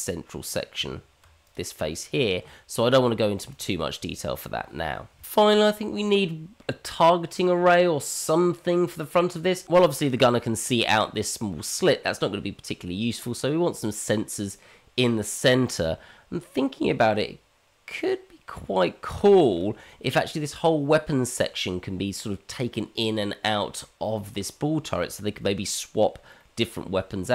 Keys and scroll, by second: 0.8 Tab, 2.4 Tab.